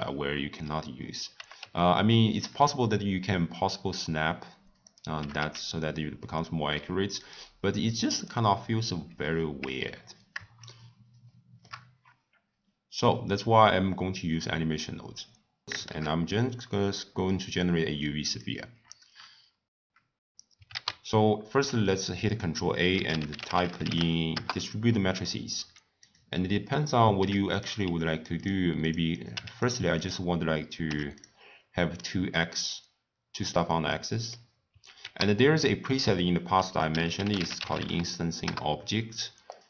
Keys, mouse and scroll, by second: 1.3 g, 4.7 click, 5.1 g, 8.1 click, 9.7 Tab, 10.6-13.7 shift+middle drag, 15.6 click, 17.4 shift+a, 18.2 click, 18.8 scroll up 1, 18.8 scroll down 1, 19.1 scroll up 1, 19.1 scroll down 1, 19.2 scroll up 2, 19.4 scroll down 1, 19.4 scroll up 1, 19.5 scroll down 1, 19.7 scroll up 1, 19.8 scroll down 1, 19.9-22.3 scroll up 5, 27.5 click, 28.8 click, 29.5 click, 31.2 click, 31.9 scroll down 1, 32.0-32.5 middle drag, 32.5 scroll down 1, 32.6 scroll up 1, 32.7-33.3 scroll down 7, 33.3 scroll up 3, 33.4 scroll down 1, 33.9-38.8 middle drag.